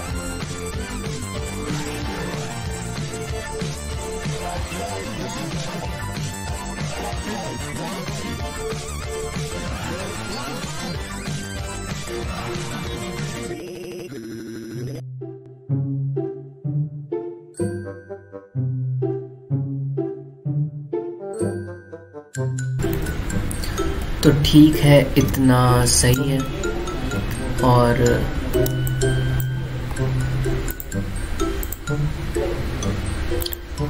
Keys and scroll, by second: 1.8 ctrl+z, 1.9 e, 2.9 ctrl+z, 4.6 ctrl+shift+t, 5.6 ctrl+z, 6.3 ctrl+t, 7.1 ctrl+alt+space, 9.4 ctrl+z, 10.7 ctrl+z, 11.3 ctrl+alt+z, 12.5 ctrl+z, 13.5 ctrl+alt+z, 13.7 ctrl+alt+space, 14.7 ctrl+z, 14.9 ctrl+z, 17.1 ctrl+j, 19.7 Delete, 22.4 ctrl+t, 26.0 alt+space, 27.1 alt+space, 29.4 space.